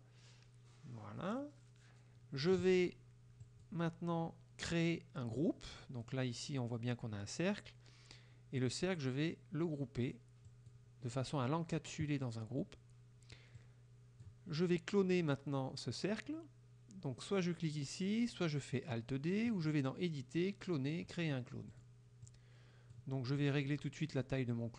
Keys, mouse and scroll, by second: 3.5 click, 10.6 click, 13.6 click, 19.6 click, 21.8 click, 22.3 click.